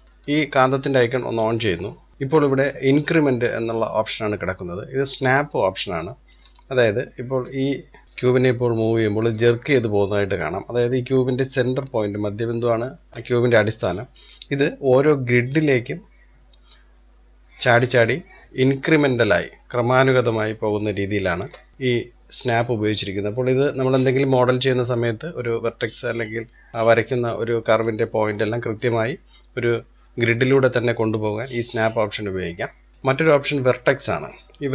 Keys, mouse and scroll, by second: 1.2 click, 2.1-4.9 drag, 5.1-5.5 scroll down 3, 5.5-6.6 middle drag, 6.6-7.5 scroll up 1, 7.5 click, 13.1 scroll up 3, 13.2 middle click, 13.8-15.2 scroll down 2, 15.4 click, 21.6 middle click, 21.7 click, 22.6 click, 27.6-30.3 middle drag, 30.3 click, 32.9-34.7 drag.